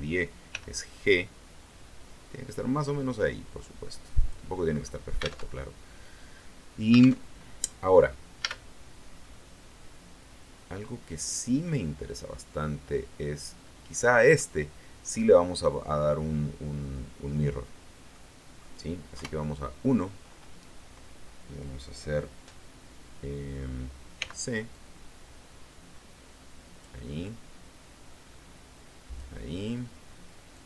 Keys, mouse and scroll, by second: 0.4 g, 4.1 click, 4.6-5.0 scroll up 1, 5.4 alt+Tab, 7.2 alt+Tab, 8.3 a, 9.1-14.4 middle drag, 16.8-18.0 scroll down 1, 18.0 middle click, 19.0 KP_1, 19.8-20.1 scroll up 1, 24.0 c, 24.6-26.9 drag, 27.1-29.2 drag, 30.4-30.6 drag.